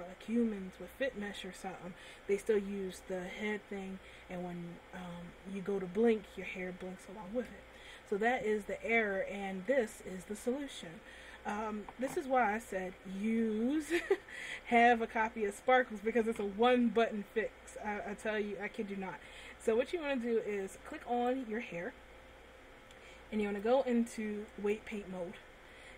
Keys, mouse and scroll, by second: 12.9-13.4 scroll down 1, 13.4 middle click, 21.4 right click, 23.6 click, 25.0 click.